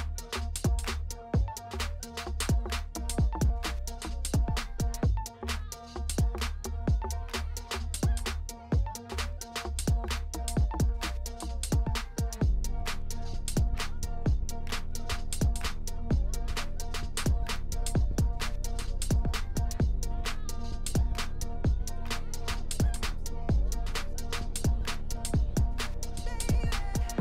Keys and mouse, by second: 0.6 Tab, 1.0-1.6 middle drag, 1.7 ctrl+z, 1.9 ctrl+z, 2.2 ctrl+z, 3.6 ctrl+click, 4.3 ctrl+click, 5.2 middle click, 6.1 ctrl+b, 8.7 Tab, 9.0 click, 9.5 KP_1, 10.3 drag, 10.5 Tab, 11.9 1, 12.1 middle click, 13.1 middle click, 13.5 ctrl+z, 13.7 ctrl+z, 14.0 ctrl+z, 14.2 ctrl+z, 14.5 ctrl+z, 15.4 2, 16.2 ctrl+click, 17.0 ctrl+b, 20.0 Tab, 20.2 middle click, 20.9-22.0 drag, 22.0 middle click, 22.9 click, 23.4-23.9 drag, 24.5 click, 25.3 click, 25.7-26.2 drag, 26.4 click, 27.1 click.